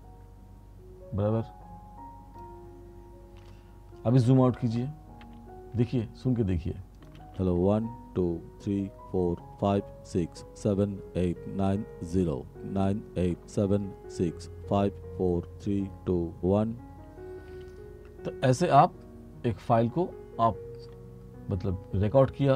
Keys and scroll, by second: 4.4 r, 7.4 space, 17.6 space.